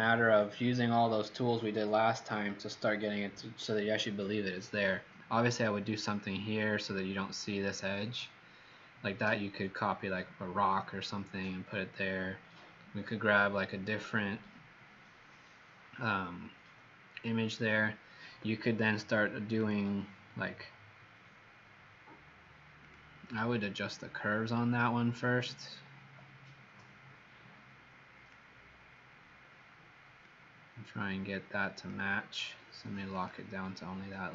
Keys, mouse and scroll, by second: 24.0 click.